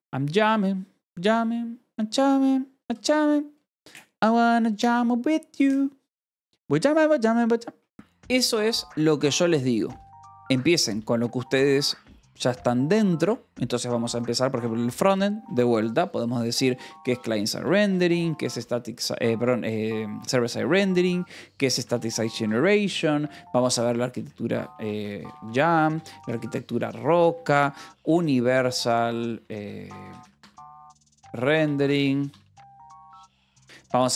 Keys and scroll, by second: 9.1-11.9 typing, 17.4-20.5 typing, 22.1 space, 22.3 /, 22.4 space, 24.1-33.9 typing.